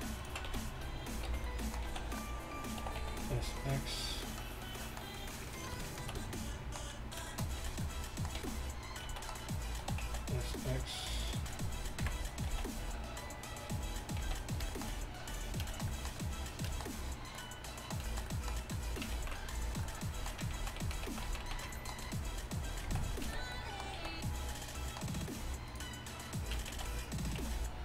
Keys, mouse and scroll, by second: 0.5 z, 1.3 b, 1.9 z, 2.9 s, 8.4 z, 9.1 z, 9.9 s, 12.1 KP_1, 12.5 l, 12.5 z, 14.3 z, 19.2 ctrl+z, 20.6 ctrl+z, 20.9 ctrl+z, 21.1 ctrl+z, 21.3 ctrl+z, 21.5 ctrl+z, 22.9 z, 23.3 b, 24.0 z, 26.8 z, 27.4 b.